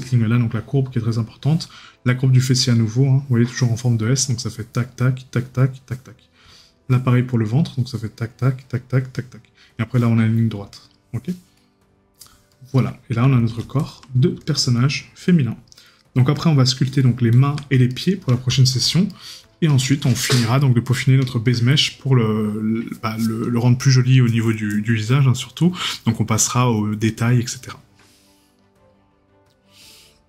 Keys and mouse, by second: 6.5 right click, 12.5 right click, 17.9 right click.